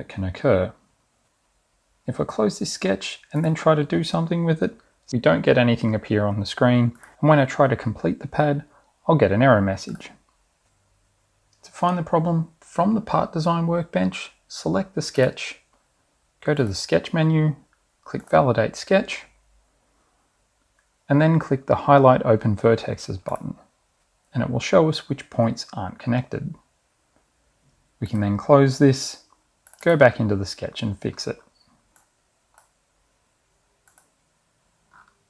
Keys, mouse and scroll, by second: 0.0-0.3 scroll up 2, 1.4 click, 2.9 click, 4.1 click, 8.5 click, 15.7 click, 17.2 click, 18.7 click, 23.9 click, 28.3 click, 29.9 click, 31.2-31.6 scroll up 2, 32.2 middle click, 34.1 click, 35.1 scroll down 2.